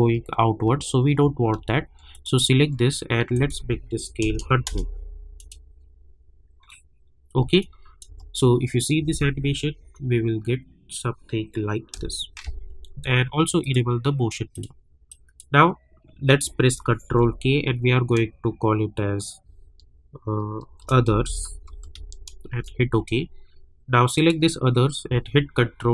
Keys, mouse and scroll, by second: 0.7-1.3 alt+scroll down 1, 2.1 click, 3.3 click, 4.6 Return, 5.4 click, 7.6 click, 8.0 space, 11.9 space, 13.6 click, 17.1 ctrl+k, 20.5-22.4 typing, 22.5 Return, 24.1 click, 25.8 ctrl+d.